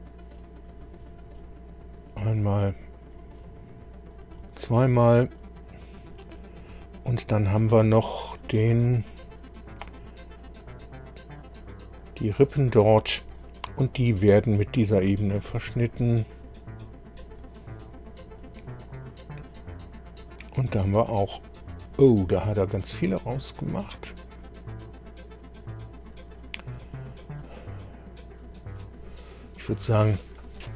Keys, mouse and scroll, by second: 0.7 click, 1.8 click, 3.0 click, 4.1 click, 6.6-6.9 scroll up 2, 8.0-8.3 scroll up 2, 8.6-9.1 scroll up 4, 9.2-9.5 scroll down 2, 10.6 click, 15.6 ctrl+click, 16.8 click, 19.0-19.7 scroll down 2, 20.3 click, 20.7-21.0 scroll down 1.